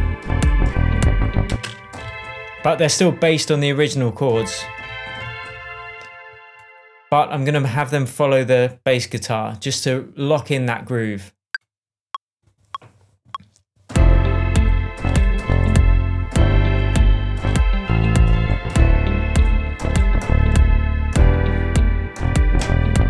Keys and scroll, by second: 1.4 space.